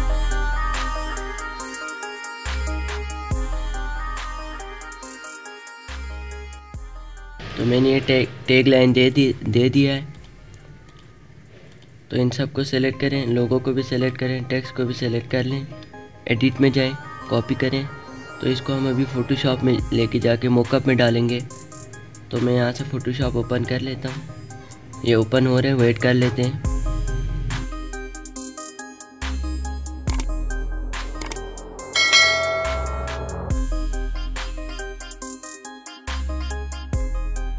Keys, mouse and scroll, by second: 0.0 space, 0.1 click, 0.9 alt+shift+click, 1.3 click, 1.9 alt+scroll down 1, 2.2 click, 2.5 ctrl+z, 2.7 click, 4.4 click, 5.8 Right, 6.2 click, 6.5 space, 6.5 click, 6.9 space, 8.8 click, 13.6 shift+click, 22.0 click.